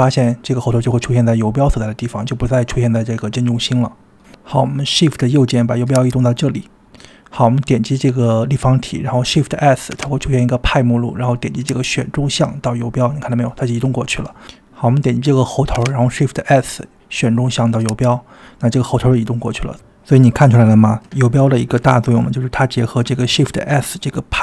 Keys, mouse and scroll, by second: 1.2 click, 6.0-8.2 shift+right drag, 8.2 click, 8.8 click, 9.9 shift+s, 13.3 click, 15.7 shift+s, 18.6 click.